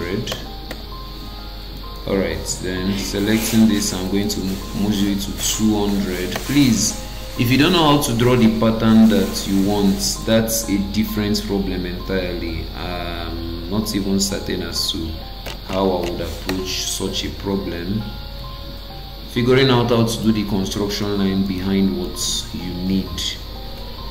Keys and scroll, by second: 0.3 Return, 6.3 Return, 16.5 Return.